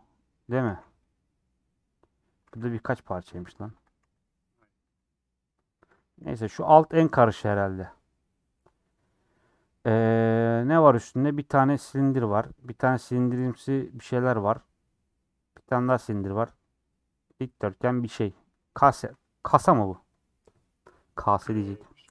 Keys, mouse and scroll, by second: 0.4 Tab, 0.7 a, 1.0-3.5 middle drag, 3.5 p, 3.6 Tab, 3.8 click, 4.3 g, 4.8 click, 4.9 g, 6.2 /, 6.4 /, 6.8-16.9 middle drag, 16.9 scroll down 3, 17.1 middle click, 18.1 scroll up 1, 18.2-22.1 middle drag.